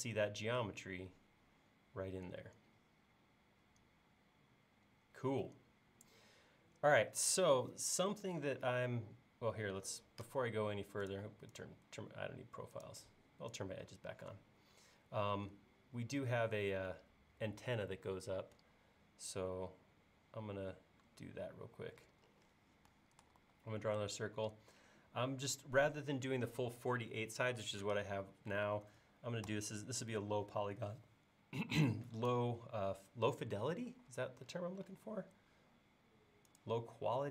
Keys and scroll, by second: 23.4 c, 28.8 1, 33.9 l.